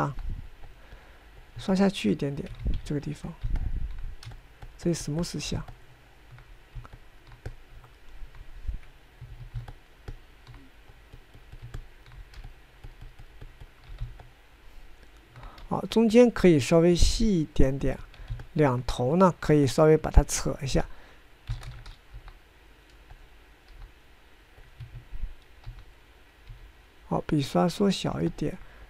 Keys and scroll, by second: 1.3 f, 3.7 ctrl+z, 10.4 Escape, 11.4 Escape, 21.9 g, 22.8 ctrl+space, 23.4 f, 24.9 f, 26.0 Escape, 26.9 g, 27.7 f.